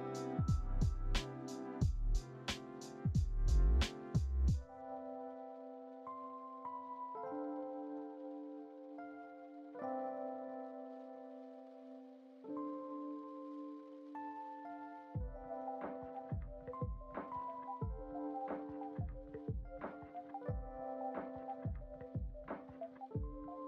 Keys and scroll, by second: 0.9 alt+x, 1.9 alt+x, 4.6 alt+x, 7.2 alt+x, 9.3 alt+x, 11.8 alt+x.